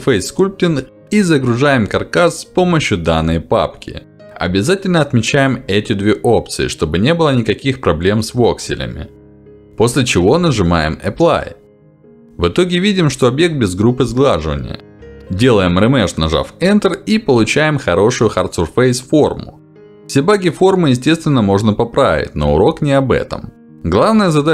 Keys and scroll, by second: 10.9 Escape, 14.8 w, 16.3 w, 17.3 Return, 21.4 w.